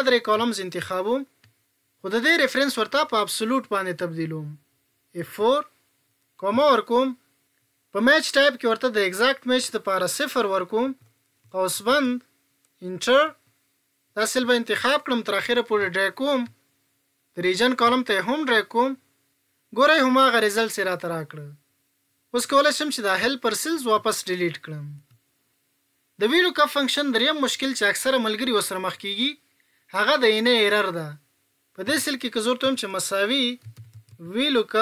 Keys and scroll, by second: 5.1 F4.